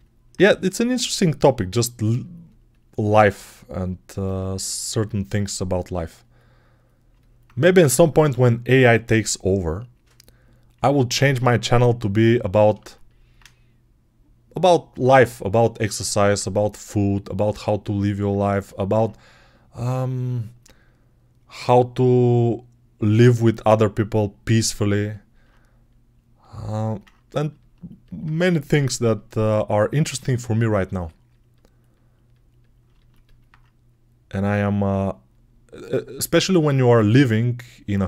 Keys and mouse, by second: 12.7-18.1 alt+shift+right drag, 18.1-31.7 alt+shift+drag, 31.7-32.7 right drag, 32.7 alt+shift+click, 33.3-35.7 right drag, 35.7-38.0 drag.